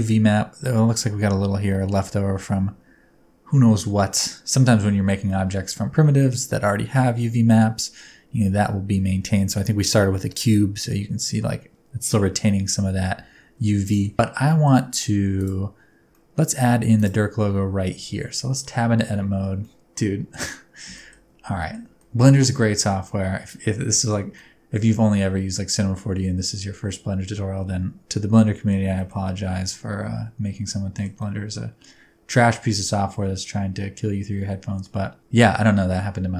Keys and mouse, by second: 5.2 middle click, 7.5 middle click, 13.9 shift+middle click, 14.5 middle click, 16.1 middle click, 18.3 Tab, 19.2 a, 19.6 middle click, 20.9 middle click, 21.6 middle click, 21.8 a, 22.0 middle click, 22.6 shift+middle click, 23.1 middle click, 23.9 shift+middle click, 24.3-28.7 middle drag, 28.9 shift+middle click, 29.2-31.0 middle drag, 31.2-34.8 middle drag, 35.2 middle click, 35.9 middle click.